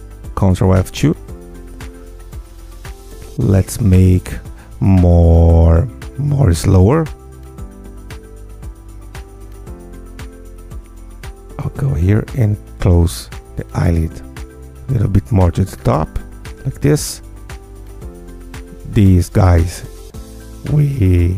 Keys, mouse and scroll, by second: 0.8 ctrl+click, 3.5 click, 4.3 click, 4.7 ctrl+F2, 5.0 ctrl+click, 5.8 ctrl+F2, 6.6 Escape, 8.6 click, 9.6 click, 11.1 Tab, 11.4 scroll up 1, 12.1 click, 12.5 click, 13.1 g, 13.7 click, 14.4 click, 15.1 g, 16.1 click, 17.0-18.7 drag, 19.3 ctrl+click, 20.6 ctrl+click, 21.1 ctrl+click.